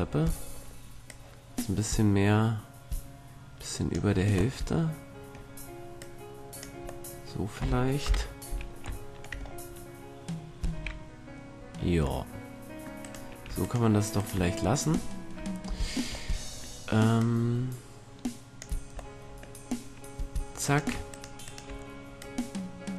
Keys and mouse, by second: 3.1-4.5 middle drag, 6.1 click, 6.7-8.2 middle drag, 8.2 KP_7, 10.9 a, 12.9-14.1 middle drag, 17.3-19.2 drag, 19.2 middle click, 21.1-22.9 drag, 22.3-22.9 right drag.